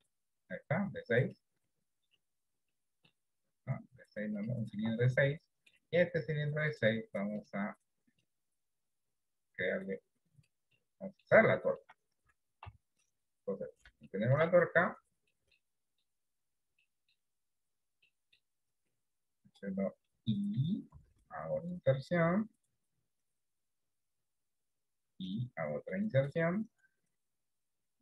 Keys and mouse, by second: 1.5 middle click, 2.8 middle click, 4.4 click, 4.9 Tab, 5.5 middle click, 6.8 click, 8.3-10.5 drag, 10.9 middle click, 11.7 shift+middle click, 12.6 KP_7, 14.0 shift+middle click, 15.4 middle click, 15.8 middle click, 17.0 middle click, 18.1 middle click, 27.8 i.